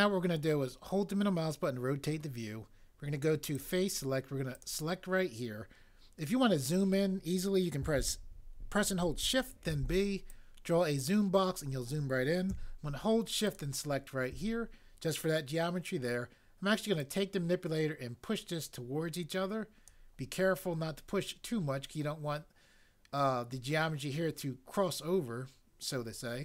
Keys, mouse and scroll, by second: 9.6 b.